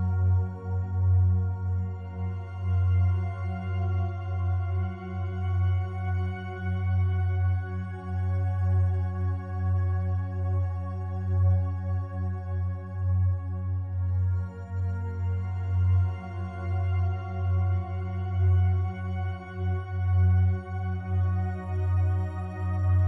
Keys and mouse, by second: 0.6-1.1 alt+drag, 1.4-1.7 ctrl+alt+drag, 2.1-2.9 ctrl+alt+drag, 3.4 s, 4.4 Escape, 5.0-7.1 alt+drag, 7.2-8.2 drag, 9.6-10.6 drag, 10.8-11.7 drag, 11.7 s, 15.5 Escape, 16.5 1, 18.6-19.0 alt+drag, 19.5 shift+click, 20.8 /, 21.7 1, 22.5-23.0 ctrl+alt+drag.